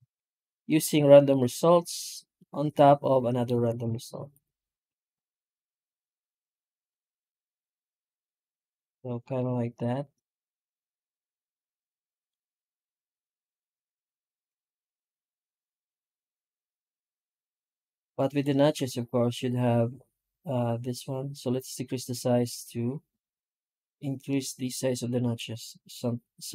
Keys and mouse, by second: 0.4 ctrl+shift+right click, 1.1 middle click, 1.9 middle click, 2.8 middle click, 2.9 middle click, 3.1 middle click, 3.3 Tab, 3.7 shift+q.